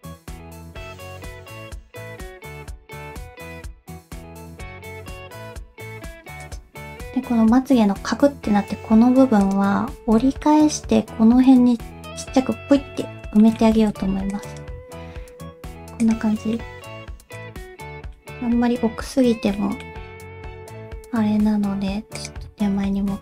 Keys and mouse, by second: 1.3 middle click, 2.0 g, 2.5 middle click, 2.8 g, 3.6 click, 3.7 g, 4.4 click, 4.4 g, 4.8 click, 5.3 alt+z, 9.4 click, 10.0 alt+z, 10.4 middle click, 13.4 shift+middle click, 13.8 alt+a, 14.0 c, 15.0 g, 16.3 middle click, 16.7 g, 17.6 middle click, 19.6 middle click, 20.6 g, 22.5 middle click, 23.1 alt+z.